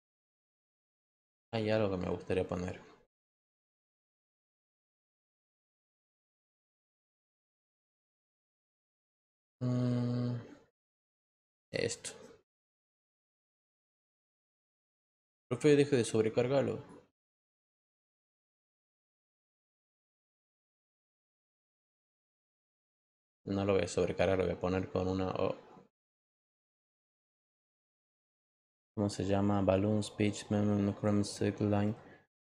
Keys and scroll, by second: 3.2-5.1 typing.